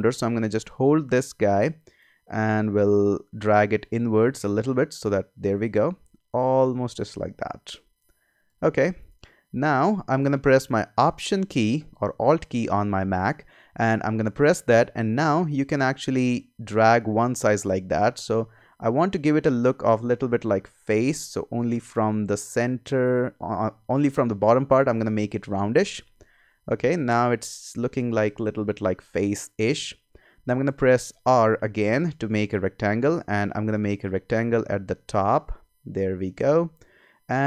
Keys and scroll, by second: 26.4 Return, 27.6 Escape, 31.3 r.